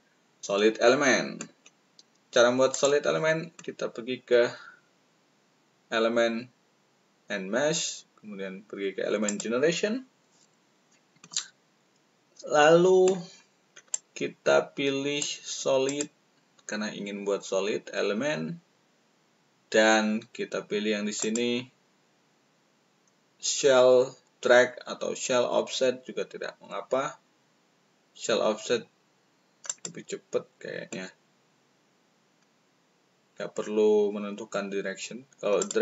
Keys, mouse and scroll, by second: 2.7 click, 2.7 right click, 9.2 click, 13.9-15.3 drag, 15.8 click, 21.1 click, 29.6 click, 35.5 click.